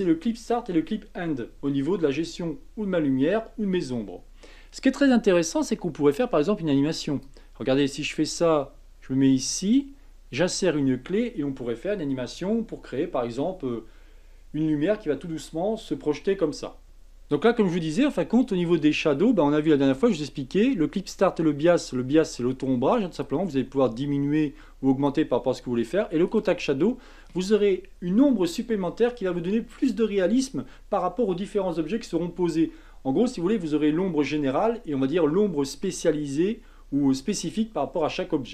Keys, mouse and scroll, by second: 7.2-10.2 drag, 16.8-18.1 scroll up 1, 18.1-23.2 shift+middle drag, 23.2-26.4 drag.